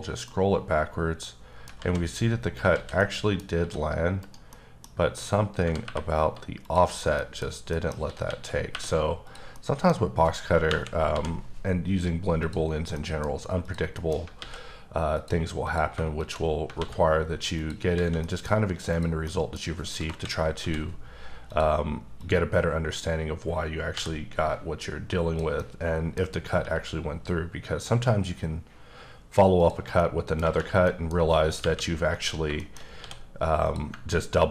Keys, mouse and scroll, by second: 0.1 scroll down 1, 0.3 middle click, 1.8 z, 2.0 scroll up 3, 2.7 z, 3.0 middle click, 3.6 s, 4.2 right click, 4.5 middle click, 4.8-5.4 scroll up 5, 5.6 g, 5.8 y, 6.6 click, 6.8-7.5 scroll down 5, 7.2 middle click, 7.7 middle click, 8.0 s, 8.2 x, 8.7 y, 9.3 click, 9.5 middle click, 10.7 KP_1, 11.7-12.4 scroll down 1, 12.4 click, 12.7 scroll down 2, 12.9 scroll up 1, 13.0 middle click, 13.2-13.6 scroll down 3, 13.6 click, 13.9 middle click, 14.6 x, 15.1 click, 15.6 click, 16.2 click, 16.5 scroll down 3, 16.8 alt+x, 17.5 click, 17.9 alt+a, 18.2 middle click, 18.5 scroll up 2, 18.9 click, 19.3 middle click, 19.6 scroll up 2, 20.0 KP_1, 20.6 d, 21.5 click, 22.2 click, 23.9 b, 25.6 middle click, 26.6 e, 29.6 click, 29.9 scroll down 1, 30.0 middle click, 30.8 middle click, 31.6 KP_1, 32.2 scroll up 4, 32.6 shift+middle click, 32.8 scroll up 1, 33.0 d, 33.6 click.